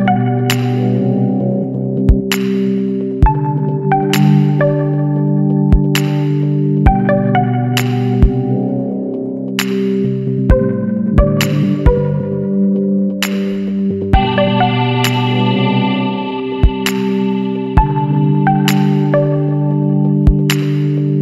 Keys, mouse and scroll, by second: 0.0 KP_7, 0.4 KP_Decimal, 2.7-4.1 middle drag, 4.1 r, 8.8-10.4 middle drag, 10.4 KP_9, 13.1-13.6 middle drag, 13.6-14.1 scroll up 2, 14.1-16.5 middle drag, 16.5 click, 17.6-18.6 drag, 18.6-19.3 scroll down 2.